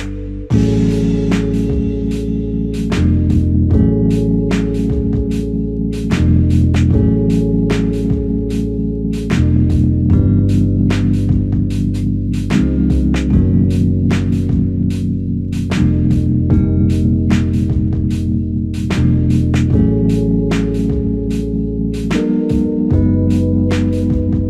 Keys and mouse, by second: 0.6 double click, 5.7 alt+click, 9.8 double click, 10.3 alt+click, 13.6 double click, 14.4 f, 15.3 alt+click, 17.6 double click, 19.1 alt+click, 20.9 double click.